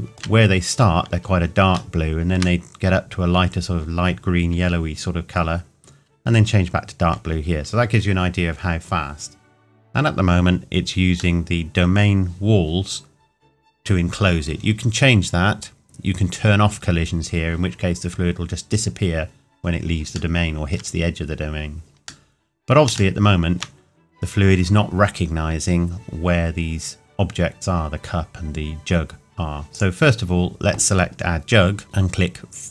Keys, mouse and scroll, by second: 2.0 shift+middle click, 11.4 middle click, 15.9-16.3 scroll down 1, 20.1 shift+Num_Lock, 20.1 scroll down 1, 20.4 shift+middle click, 23.2 shift+middle click, 27.4-27.8 scroll down 1, 29.7 click.